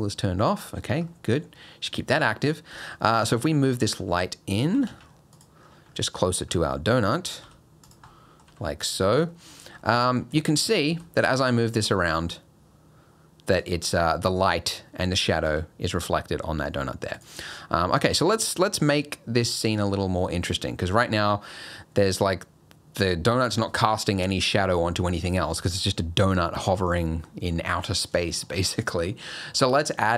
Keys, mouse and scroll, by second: 0.4 middle click, 1.1 middle click, 2.7 g, 3.5 middle click, 4.0 g, 4.7 g, 5.6-6.0 scroll up 7, 6.0 middle click, 6.5 scroll up 2, 6.7 middle click, 7.1 scroll down 2, 7.4 g, 8.1 middle click, 8.5 g, 9.0 scroll up 4, 9.3 middle click, 9.5 scroll down 3, 9.8 middle click, 10.0 scroll up 2, 10.4 shift+middle click, 10.9 g, 13.8 scroll up 3, 14.4-15.5 scroll up 1, 15.5 g, 17.4 scroll down 3, 17.7 middle click, 18.0 scroll up 2, 18.2 shift+middle click, 18.6 middle click, 20.0 middle click, 20.6-21.1 scroll up 2, 21.1 middle click, 25.8 scroll up 4, 26.2 middle click, 27.6 shift+middle click, 27.9 scroll down 2, 28.2 shift+middle click, 28.7-29.3 scroll down 3, 29.3 middle click.